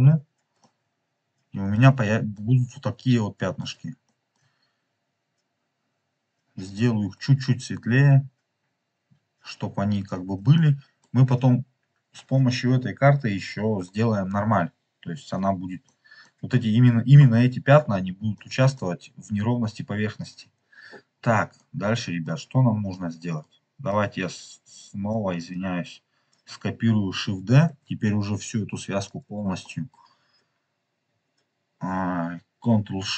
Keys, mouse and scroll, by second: 0.4 click, 0.4 scroll down 1, 0.7-1.7 middle drag, 2.2-3.6 middle drag, 4.0 shift+middle click, 5.1 scroll up 3, 6.6 click, 10.5-11.0 middle drag, 11.0 scroll down 2, 11.7-12.0 scroll up 5, 12.3 scroll down 2, 15.0 scroll up 2, 15.9 middle click, 18.2 scroll up 1, 18.3-18.8 middle drag, 19.2-20.3 scroll down 4, 20.5-21.1 scroll down 7, 21.5 middle click, 22.2-22.8 scroll down 3, 22.8 middle click, 23.8-25.1 drag, 27.6 shift+d, 29.0 click, 29.5 middle click, 29.8 click, 29.8-30.7 middle drag, 30.0 scroll up 3.